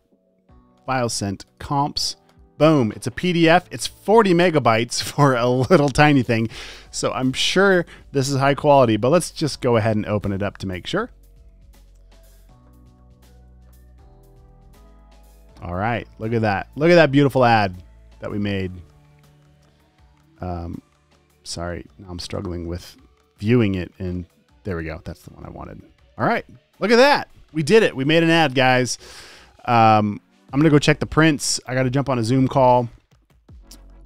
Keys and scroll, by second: 11.6 super+o.